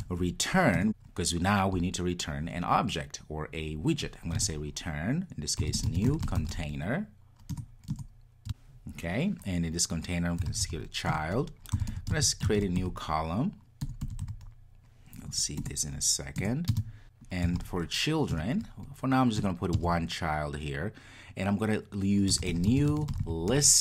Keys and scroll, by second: 0.8 Return, 7.6 Return, 11.1 Return, 15.6 Return, 18.4 Return.